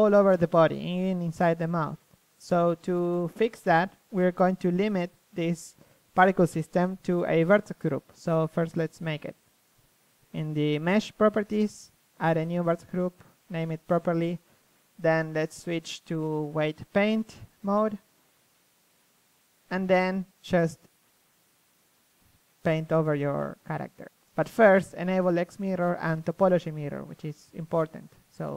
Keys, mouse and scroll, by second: 0.0 z, 0.8 z, 1.8 KP_3, 4.2 middle click, 7.4-8.8 drag, 9.2-11.5 drag, 15.5-17.4 drag, 18.9 t, 21.4 t, 22.9 t, 23.7 click, 25.1-26.5 drag, 26.5 KP_1, 27.3 KP_1, 27.7 f.